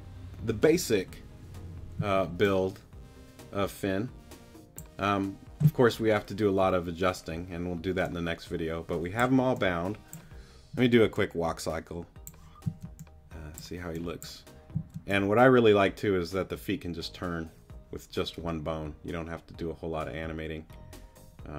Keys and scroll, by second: 2.0 z, 12.6 z, 14.7 z.